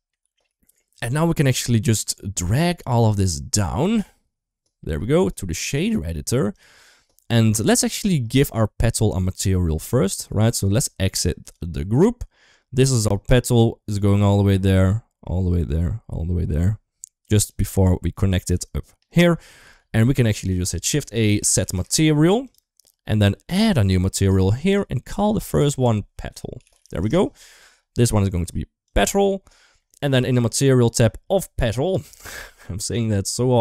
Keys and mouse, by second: 0.0 ctrl+s, 0.4 shift+middle click, 3.6-5.0 drag, 5.5-6.5 drag, 7.2 shift+middle click, 9.9 shift+middle click, 10.5-11.5 right drag, 12.4 click, 13.1-16.3 middle drag, 17.0 click, 17.2 click, 17.6 click, 18.2 g, 19.4 ctrl+s, 20.0 shift+a, 23.3 click, 23.7 shift+middle click, 24.5 click, 25.3-26.8 drag, 28.0 click, 29.9 middle click, 32.5 shift+middle click.